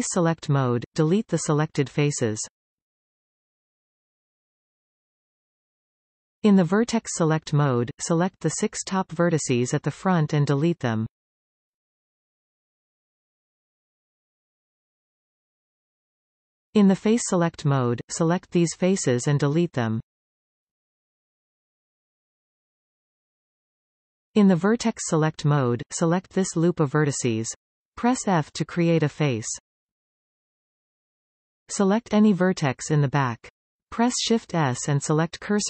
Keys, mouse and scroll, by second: 0.0 shift+click, 1.0 shift+click, 2.0 shift+click, 2.6 shift+click, 3.8 click, 4.8 x, 6.2-9.5 middle drag, 9.5 click, 10.0 middle click, 11.0 click, 11.8 shift+click, 12.5 shift+click, 13.2 shift+click, 13.8 shift+click, 14.5 shift+click, 15.0 x, 18.1 scroll up 2, 19.3 click, 20.3 click, 21.0 alt+shift+click, 22.1 x, 23.5 scroll down 2, 23.8-26.2 middle drag, 26.2 click, 27.2 alt+shift+click, 27.8-29.8 middle drag, 29.8 f, 31.7-33.8 middle drag, 33.8 click, 34.8 shift+s.